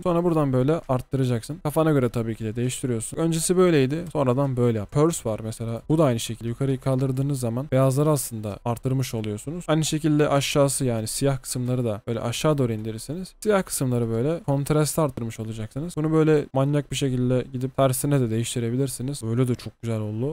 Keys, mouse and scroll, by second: 4.9 typing, 19.2-20.3 typing.